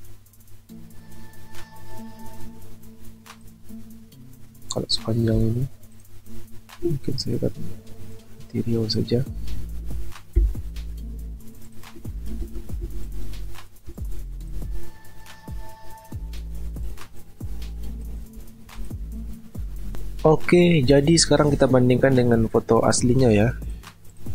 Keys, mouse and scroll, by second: 10.4 Delete, 12.4 ctrl+t, 13.0 shift+click, 15.2 shift+click, 18.4-19.7 alt+scroll down 1.